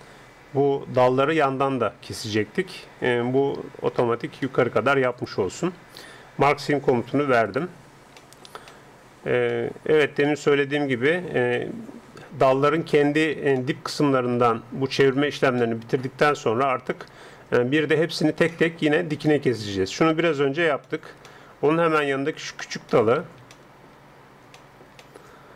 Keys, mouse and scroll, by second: 4.4-6.9 middle drag, 7.5-10.3 drag, 10.3-25.5 middle drag.